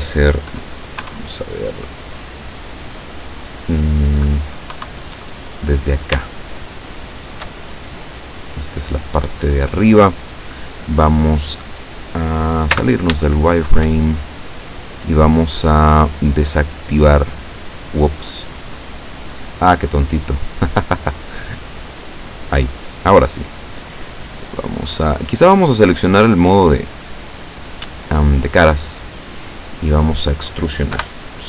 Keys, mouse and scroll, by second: 1.1 KP_3, 4.8 KP_1, 6.3-7.7 shift+middle drag, 7.7-8.1 shift+scroll up 3, 8.5 scroll down 2, 9.5 scroll up 2, 12.8 z, 13.4 shift+middle click, 14.0-14.5 shift+scroll up 2, 16.5 click, 17.8-18.2 scroll down 1, 19.0-19.4 scroll down 1, 19.7-21.3 middle drag, 21.4-23.0 middle drag, 23.0-24.3 scroll up 2, 24.8 middle click, 26.0 click, 27.1 right click, 28.6-30.0 middle drag, 30.0 scroll down 1, 31.0 KP_7.